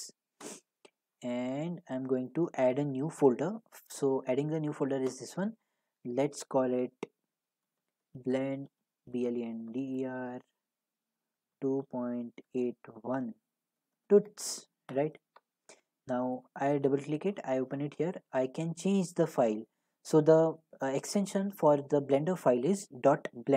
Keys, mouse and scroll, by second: 0.4 middle click, 0.5 right click, 2.3 click, 7.7-9.3 typing, 11.5-14.3 typing, 14.9 Return, 16.3 click, 16.5 click, 18.0 typing, 19.0 click, 20.1 click, 21.2 click.